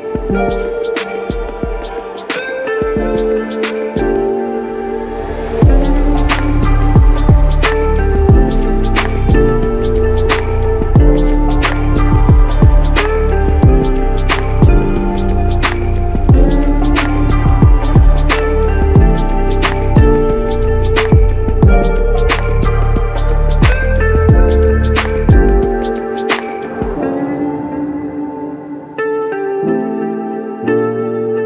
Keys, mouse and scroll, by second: 5.2 alt+click, 6.4 alt+click, 8.4 alt+click, 11.0 alt+click, 13.2 alt+click, 15.4 alt+click, 19.0 alt+click, 20.3 alt+click, 22.0 alt+click, 23.9 alt+click, 25.4 alt+click, 28.2 alt+click.